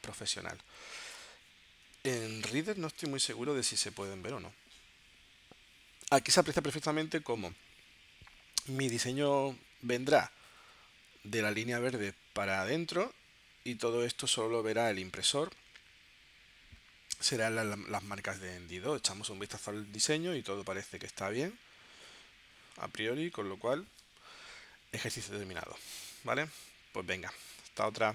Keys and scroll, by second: 2.4 super+-.